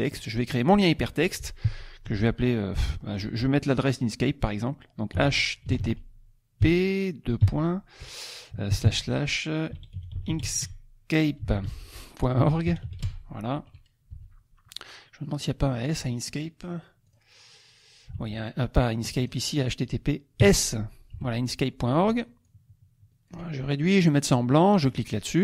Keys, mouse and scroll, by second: 0.5 click, 5.1 h, 5.6 t, 6.6 p, 9.4-13.5 typing, 14.1 F1, 15.9 click, 17.0 click, 18.2 alt+Tab, 19.0 click, 19.6 click, 20.4 s, 21.1 F1, 22.4 ctrl+shift+click, 24.9 click.